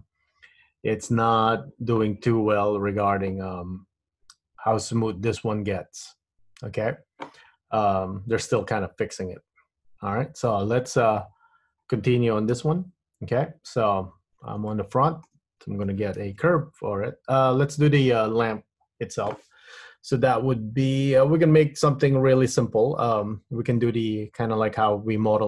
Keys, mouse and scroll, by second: 2.6 middle click, 7.7 scroll up 2, 8.0-8.4 scroll down 4, 8.7 middle click, 10.7-12.0 scroll down 1, 12.0-12.7 scroll down 1, 12.7 KP_1, 14.8 shift+middle click, 16.3 shift+a.